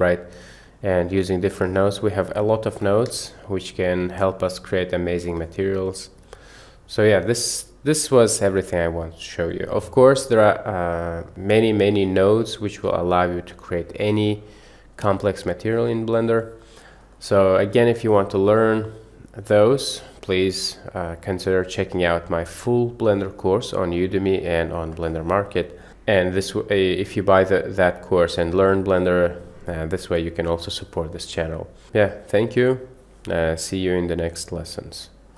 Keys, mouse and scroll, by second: 3.3 shift+a.